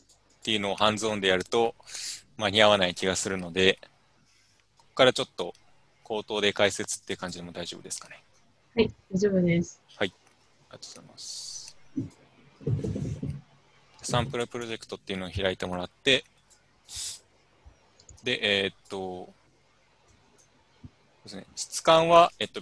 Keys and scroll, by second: 5.6 u, 10.1 u.